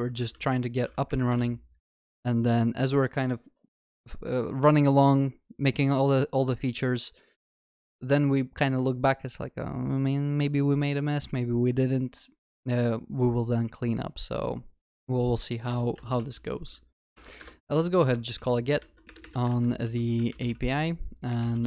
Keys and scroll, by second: 1.3 Return, 17.4 Return.